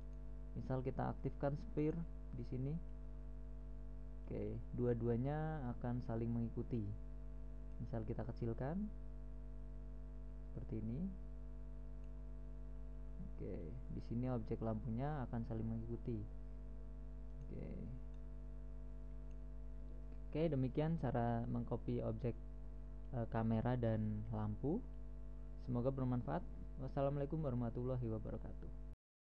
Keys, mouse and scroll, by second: 0.5 right click, 0.5-1.9 drag, 1.9 right click, 4.0 middle click, 9.9-14.0 middle drag, 14.9 click, 16.5-17.1 middle drag, 17.1 s, 18.5-20.2 drag, 21.9-22.3 middle drag, 22.3 right click, 22.3 middle click, 22.7 right click.